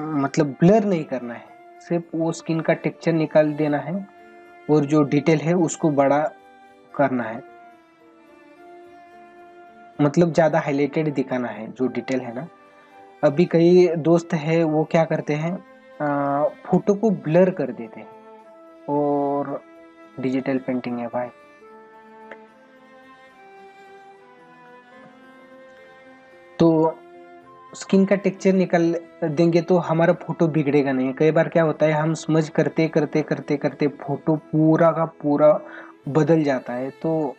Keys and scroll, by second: 35.5 space.